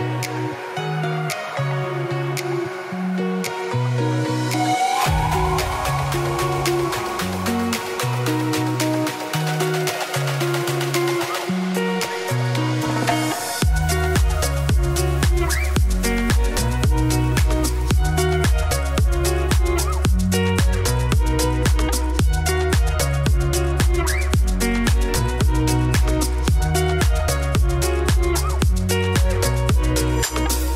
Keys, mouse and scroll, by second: 0.3 Tab, 0.4 scroll down 2, 0.6 middle click, 0.9 Tab, 1.3 click, 1.7 scroll up 3, 3.0 middle click, 3.6 g, 4.3 middle click, 4.6 Tab, 5.0 middle click, 5.3-6.4 scroll down 1, 6.4-6.7 scroll up 3, 6.7 shift+right click, 6.9 shift+middle click, 7.1-7.5 scroll up 1, 7.5 shift+right click, 7.7 shift+middle click, 7.9 shift+a, 9.0 Tab, 9.2 1, 10.2 f, 11.4 shift+middle click, 11.6-11.9 scroll up 2, 12.5-12.9 scroll up 1, 12.9-15.1 drag, 16.1-17.1 scroll up 3, 17.1-17.9 scroll up 1, 17.9-18.6 scroll up 1, 18.6-19.3 scroll up 1, 19.3-21.0 scroll up 1, 21.0-21.7 scroll up 1, 21.7 click, 21.9 shift+click, 22.9 shift+click, 23.4 shift+click, 23.6 shift+click, 24.0 middle click, 24.2-24.6 scroll up 1, 24.6 alt+d, 25.7 alt+d, 26.5 alt+d, 27.9 x, 28.2 middle click, 29.0 scroll, 29.8 middle click, 30.1 ctrl+y.